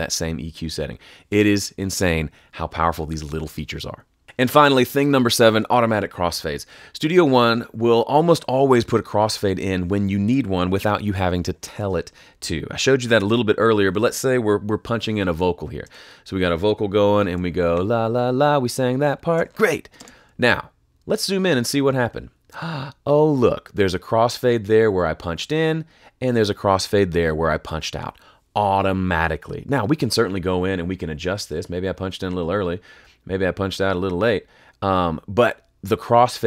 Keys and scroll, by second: 15.8 space, 17.6 \, 19.3 \, 19.9 space.